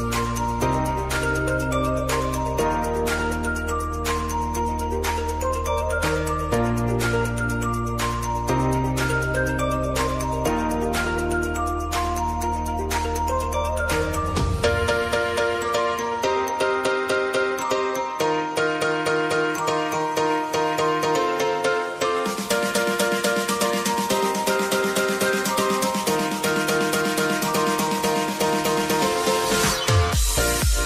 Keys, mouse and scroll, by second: 0.5-4.8 drag, 5.9-7.4 scroll down 1, 8.4-15.7 drag, 15.7-17.2 scroll up 1, 17.2 click, 19.6 ctrl+alt+Home, 20.6 click, 20.9 Return, 21.7 typing, 22.7-23.5 typing, 24.9 Return, 26.2 click.